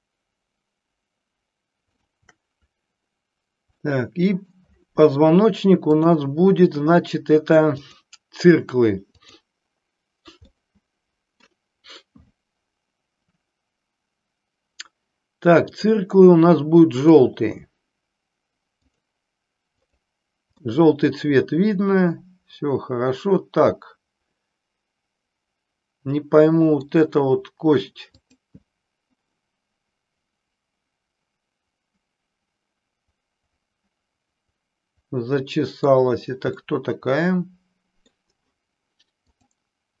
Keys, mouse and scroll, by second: 3.8 middle click, 6.0-8.0 drag, 9.1 click, 10.4-11.5 middle drag, 15.8 click, 16.9-19.0 drag, 19.8 click, 20.6-26.8 middle drag, 28.3 click, 29.3-35.9 middle drag, 36.6-38.2 middle drag, 39.2-40.0 drag.